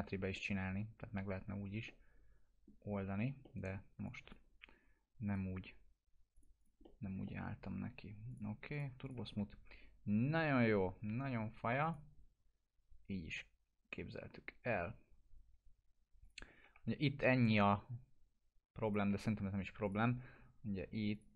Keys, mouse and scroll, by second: 4.0 click, 6.8 middle click, 7.0 scroll down 1, 7.2 alt+middle click, 8.3 click, 9.3 F4, 11.8 click, 16.2 click, 16.6 F4, 16.9-17.2 scroll up 1, 19.5 scroll up 1, 19.8 click, 20.2 F4, 21.1 click.